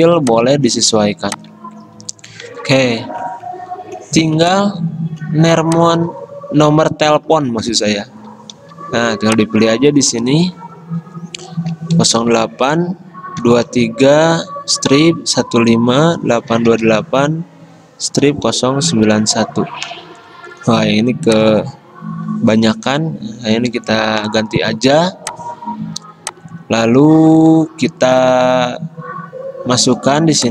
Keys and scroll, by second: 2.0 Escape, 8.7 t, 11.8-19.4 typing, 22.7-24.0 typing, 29.8 i.